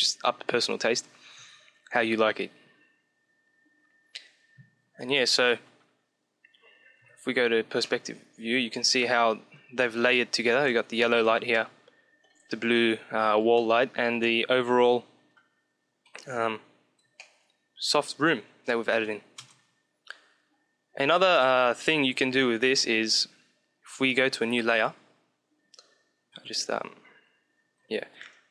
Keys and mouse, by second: 5.5 KP_5, 6.9-9.5 middle drag, 6.9 KP_5, 11.5-13.2 middle drag, 13.5-15.8 middle drag, 15.8 Home, 17.2-18.8 middle drag, 19.4 KP_0, 22.7-24.3 drag, 24.6 KP_1, 26.0 KP_1, 27.8 shift+a.